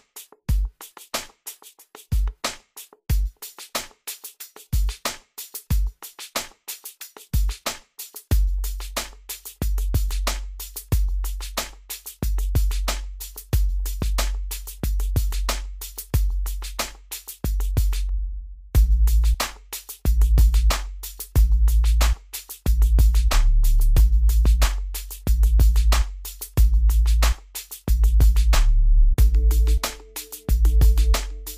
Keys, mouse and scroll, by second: 3.7 click, 6.3 click, 6.8-8.0 scroll down 1, 9.4 click, 14.9 Escape, 15.6-16.0 scroll up 1, 16.8-17.4 scroll down 1, 18.4 click, 20.4 scroll up 1, 22.2 click, 22.7 scroll down 1, 26.0-29.6 drag, 29.6-30.0 scroll up 1, 30.0 scroll down 1.